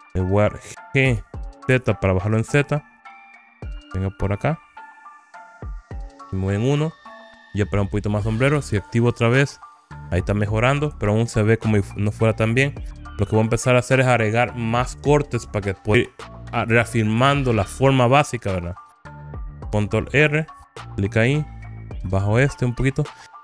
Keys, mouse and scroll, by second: 1.2 g, 1.8 z, 4.9 click, 6.4 KP_1, 9.2 click, 10.8 scroll up 1, 13.4 click, 18.3 right click, 18.7 middle click, 20.8 ctrl+r.